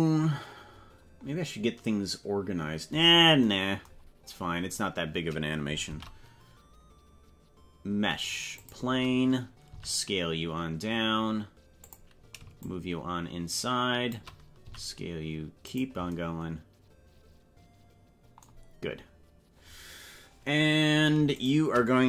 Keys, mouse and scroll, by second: 0.9-2.3 scroll down 10, 3.1 scroll up 4, 4.1 scroll up 3, 4.8 scroll down 1, 5.9 shift+a, 9.7 s, 12.6-14.3 shift+drag, 14.6 s, 21.4 shift+right click.